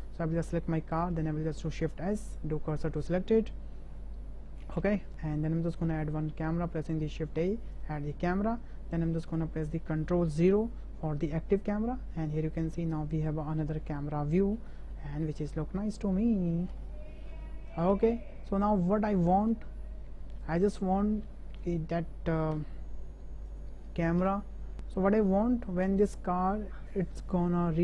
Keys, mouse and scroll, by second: 1.8 shift+s, 5.9 shift+a, 10.4 ctrl+KP_0, 13.3-13.7 shift+drag, 14.0-14.4 drag, 14.4 middle click, 14.7-15.9 shift+middle drag, 16.2 ctrl+click, 16.9 shift+click, 17.4-17.8 ctrl+drag, 18.1 ctrl+shift+click, 20.5 click, 22.5 KP_0, 23.6 click, 24.2 ctrl+KP_0, 24.7 click, 24.7 space, 25.8 space.